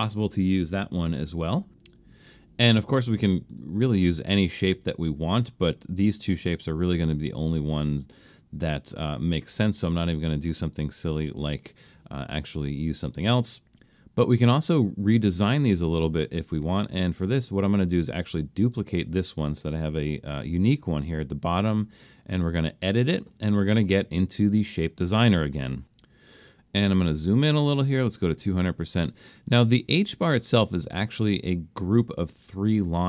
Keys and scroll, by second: 2.1 alt+super+a.